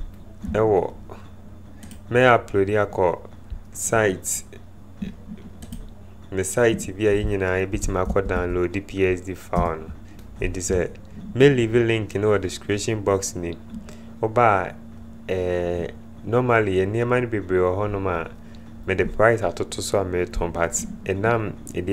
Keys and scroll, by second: 7.9-8.9 typing, 9.5 Return.